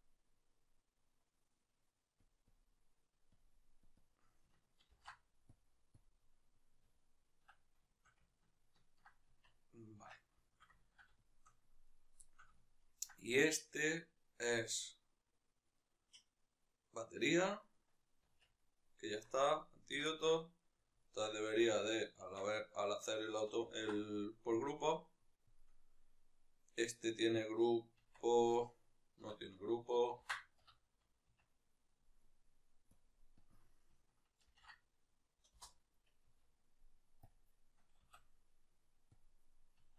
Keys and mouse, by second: 2.0-3.6 drag, 5.3 click, 5.8-7.6 drag, 7.2 Tab, 7.6-11.6 shift+middle drag, 9.2 Tab, 11.6 right click, 12.0-14.2 shift+middle drag, 14.2 right click, 17.3-18.1 right drag, 18.1 Tab, 19.8-20.7 ctrl+middle drag, 20.7-22.1 shift+right drag, 22.1 Tab, 24.5 ctrl+p, 25.3-28.0 right drag, 28.0 Tab, 28.2-31.2 right drag, 31.2 Tab, 31.5-32.7 right drag, 32.7-33.2 drag, 35.3 Return, 35.3-39.9 drag, 36.2 Tab, 37.7 a, 39.7 Tab.